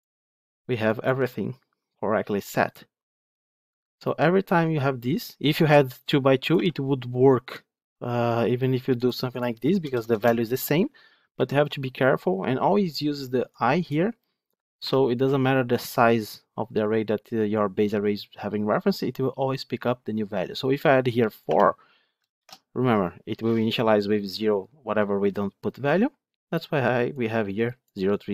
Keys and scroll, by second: 11.2 ctrl+z, 22.3 ctrl+shift+F10.